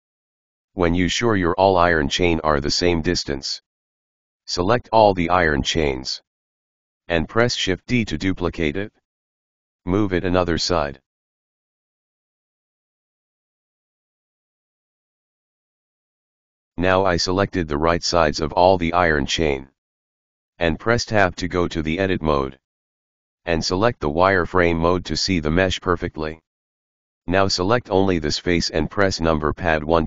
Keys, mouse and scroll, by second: 0.1 right click, 0.4 g, 0.5-1.6 scroll down 2, 1.6-2.9 scroll down 1, 2.9 click, 6.9 shift+d, 15.5-18.0 middle drag, 19.9 Tab, 20.8-23.8 middle drag, 24.9 click, 25.7-28.0 middle drag, 28.5 right click, 28.8-29.5 scroll up 4, 29.9 KP_1.